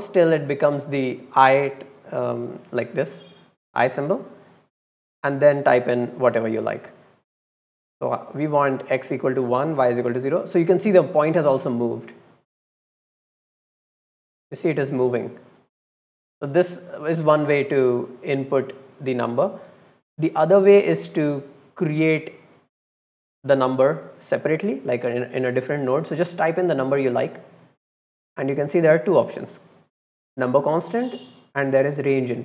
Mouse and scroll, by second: 4.4 click, 5.1 click, 8.2 click, 13.0 click, 13.8 click, 14.0 click, 14.3 click, 14.9 click, 15.1 click, 15.3 click, 15.9 click, 16.4 click, 16.8 click, 17.4 click, 18.0 click, 18.3 click, 19.4 click, 20.1 click, 20.5 click, 22.5 click, 22.7 click.